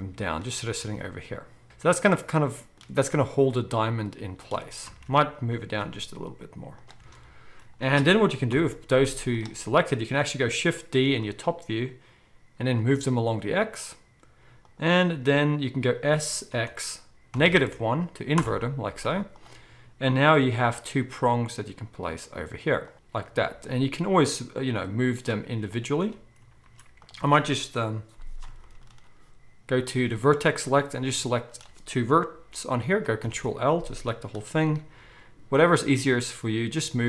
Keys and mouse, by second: 0.5-9.6 alt+middle drag, 0.9 alt+a, 4.8 ctrl+z, 5.5 g, 7.0 alt+a, 7.8 ctrl+z, 8.5 KP_7, 8.9 z, 10.0-24.8 middle drag, 11.1 shift+d, 16.1 s, 18.9 z, 20.4 g, 23.4 z, 24.8 click, 25.8-27.0 shift+middle drag, 26.6 ctrl+z, 27.0 click, 27.1-29.8 middle drag, 29.8 click, 30.7-37.0 middle drag, 33.2 ctrl+l, 34.7 g.